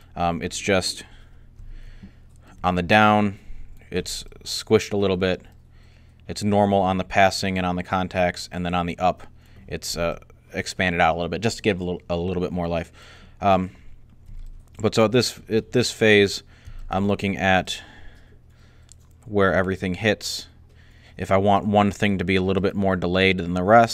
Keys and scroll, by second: 1.5 alt+a.